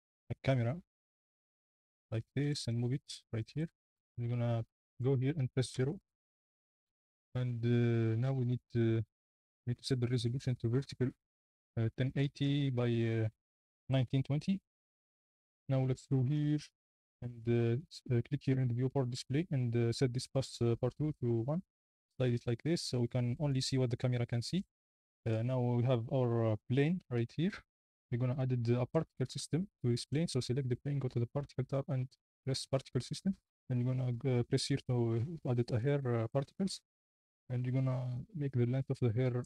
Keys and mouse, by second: 0.4 shift+a, 4.7 y, 5.7 KP_0, 6.3 z, 9.0-9.7 drag, 9.8 click, 10.3 click, 11.4-12.7 drag, 13.4 click, 16.0 drag, 21.1-22.1 drag, 24.6 z, 24.8 g, 27.1 n, 28.8 click, 32.1 click, 35.8 click.